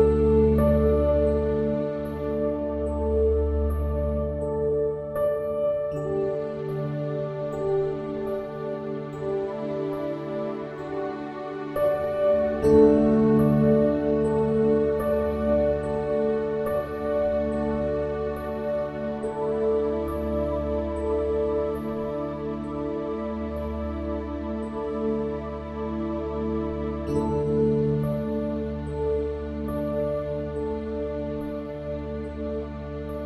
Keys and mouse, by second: 7.3 click, 16.1-16.5 drag, 29.8 click, 31.3 click.